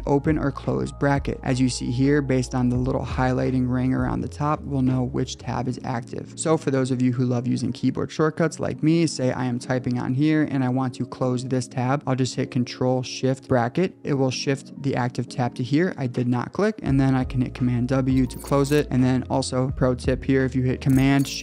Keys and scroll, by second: 0.2 ctrl+shift+], 0.8 ctrl+shift+[, 1.4 ctrl+shift+], 10.1 Return, 13.5 ctrl+shift+], 17.1 super+w.